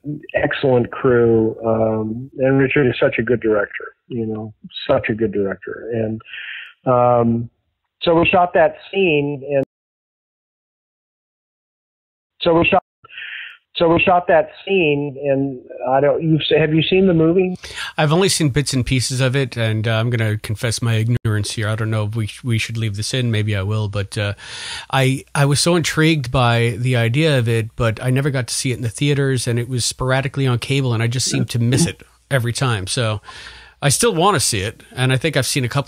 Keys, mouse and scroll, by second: 0.2 click, 1.1 click, 3.0-4.2 drag, 4.5 click, 5.4 click, 6.1 click, 7.8 click, 9.5 space, 9.8-11.4 drag, 11.9 ctrl+shift+Delete, 12.2 space, 12.7 space, 12.8 click, 12.9 space, 14.5 ctrl+s, 18.7-20.7 drag, 21.1 Delete, 22.1 click, 23.0 click, 24.0-25.2 drag, 25.7 click, 27.1-29.1 drag, 32.6 click, 33.4 click, 35.5-35.8 drag.